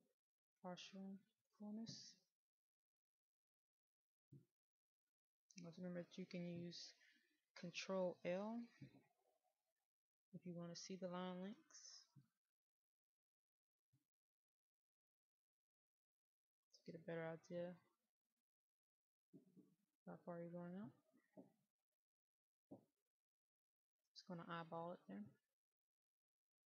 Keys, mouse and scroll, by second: 10.3 ctrl+i, 11.8-12.5 scroll down 1, 15.6 middle click, 17.3-20.7 drag, 23.4-26.6 scroll up 1.